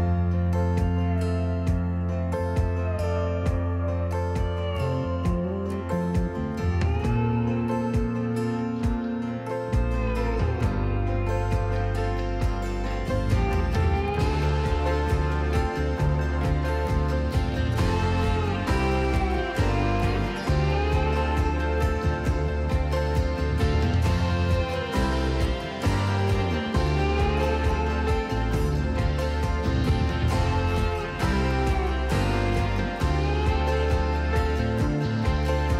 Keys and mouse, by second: 0.1 KP_3, 0.3 KP_0, 0.5 KP_Enter, 2.9-4.2 shift+middle drag, 18.5 click, 23.4 click, 26.2 click, 34.9 click.